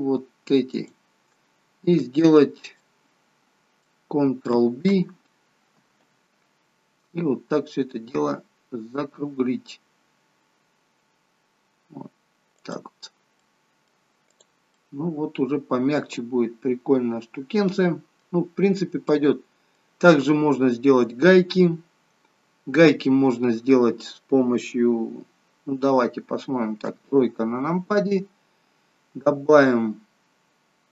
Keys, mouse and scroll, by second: 0.7 alt+shift+click, 2.8 middle click, 6.1 ctrl+b, 13.1 scroll down 2, 13.4 middle click, 14.3 click, 14.8 middle click, 19.1 middle click, 20.1 scroll up 3, 22.2-23.1 scroll down 3, 26.8 KP_3, 28.0-28.4 scroll up 4.